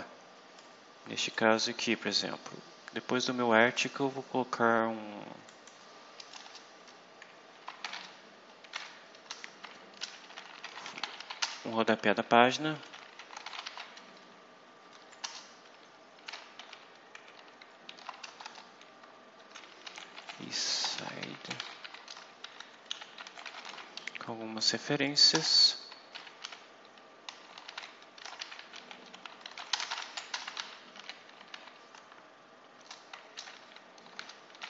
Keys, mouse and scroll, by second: 0.5 click, 2.2-3.6 scroll down 8, 3.9-4.2 scroll down 2, 5.3 click, 6.2 Return, 9.2 Return, 9.6-14.0 typing, 15.1 Return, 16.2 shift+', 16.5 shift+h, 17.0 4, 18.2-24.0 typing, 25.2 shift+Return, 26.0-31.9 typing, 32.7 Return, 33.0-34.6 typing.